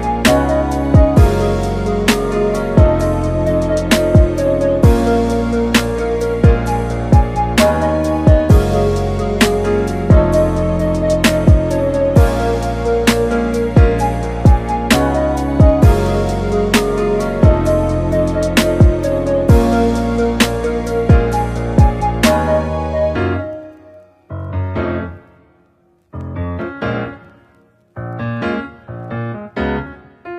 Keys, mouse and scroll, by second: 0.1 scroll down 4, 0.3-0.7 middle drag, 0.7-2.6 scroll up 4, 2.6 click, 10.1-13.1 drag, 15.3 r, 21.9-22.8 middle drag, 22.8-23.1 scroll up 3, 23.1-25.2 shift+middle drag, 29.7-30.3 drag.